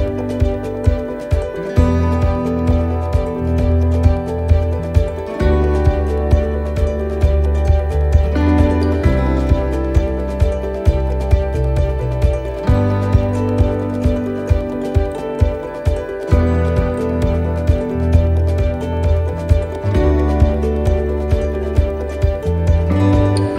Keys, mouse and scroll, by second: 1.0-1.5 scroll down 1, 1.5 click, 4.8 middle click, 6.5 click, 8.5 middle click, 9.3-9.6 scroll up 3, 9.7 shift+middle click, 10.2 middle click, 10.9-11.2 scroll up 2, 11.3 shift+middle click, 11.8 scroll up 1, 12.7-13.2 scroll down 4, 14.9 click, 19.5 click.